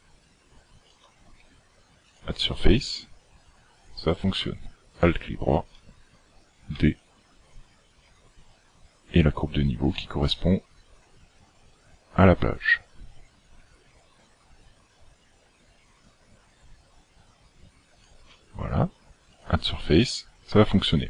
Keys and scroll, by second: 1.1 d, 6.8 d, 18.1 d, 18.3 d.